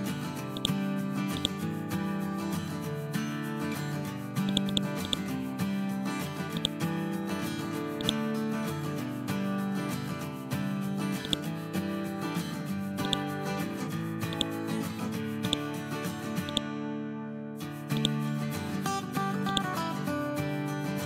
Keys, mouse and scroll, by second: 0.5-2.5 drag, 11.2-13.6 drag.